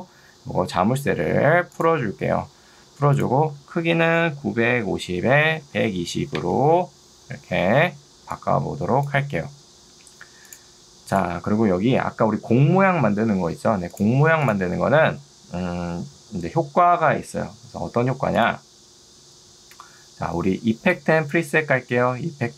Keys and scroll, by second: 1.1 Escape, 4.7-6.4 typing, 5.3 Tab, 6.5 Return, 8.3 ctrl+2, 9.9 Escape, 20.7 ctrl+2.